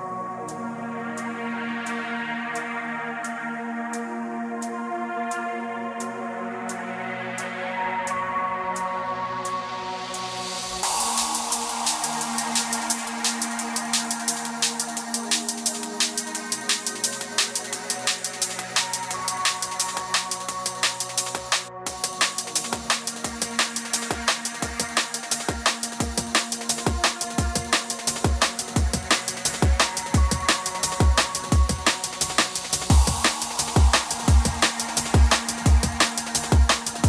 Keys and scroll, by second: 29.2 space, 32.7 space, 35.9 space.